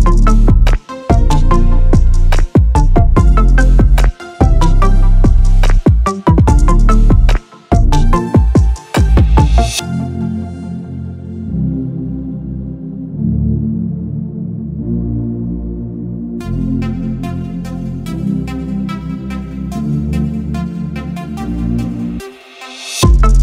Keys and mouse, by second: 0.2 click, 1.4 shift+d, 5.7 click, 7.5 click, 8.5 right click, 10.6 click, 12.6 click, 14.2 click, 14.8-17.5 right drag, 18.6 click, 19.5 click, 20.3 Tab, 21.4 s.